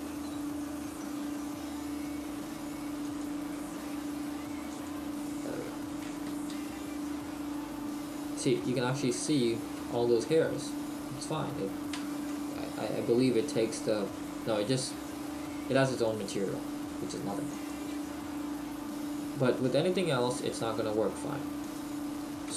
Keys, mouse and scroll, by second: 5.5 click, 12.1 shift+middle click, 17.0 click.